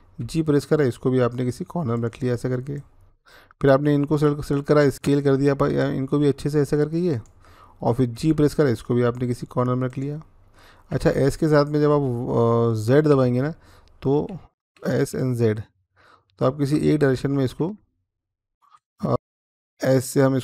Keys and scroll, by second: 0.0 g, 4.6 s, 7.9 g, 10.7 s, 13.4-19.1 typing, 19.1 ctrl+z.